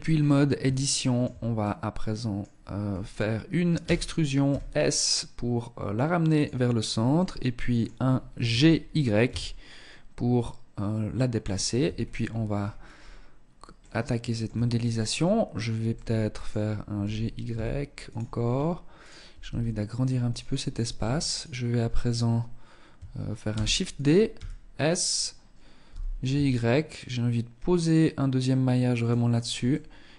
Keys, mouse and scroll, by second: 0.0 shift+middle click, 0.4-0.8 shift+scroll down 1, 0.8 middle click, 2.1-2.6 scroll up 2, 3.1 e, 6.4 middle click, 7.3-7.7 scroll up 1, 7.7 g, 11.0 Tab, 11.2-11.7 scroll down 7, 11.7-12.3 scroll up 10, 12.9 middle click, 13.7 Tab, 15.1 middle click, 16.2 g, 18.2 alt+right click, 18.7 s, 19.5 click, 20.5 alt+right click, 22.7 shift+d, 23.5 s, 25.1 g, 28.9 middle click.